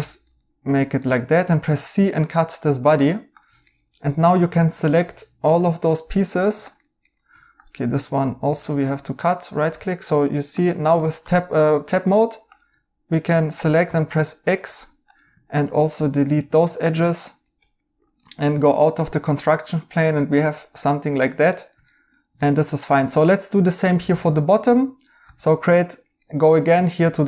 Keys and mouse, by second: 0.2 right click, 1.4 c, 3.4 Tab, 3.6 right click, 6.2 right click, 7.7-8.8 typing, 9.1 right click, 11.1 Tab, 13.8 x, 14.1 right click, 14.7 x, 16.6 x, 17.0 right click, 18.4 right click, 21.4 right click, 25.2 a, 26.2 right click.